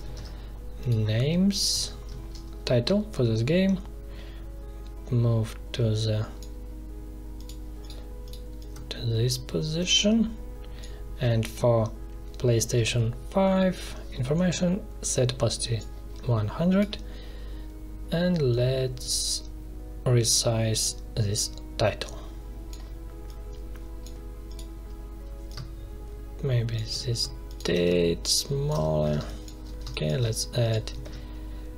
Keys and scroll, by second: 0.1 ctrl+c, 1.7 ctrl+v, 29.1 space, 31.0 ctrl+c.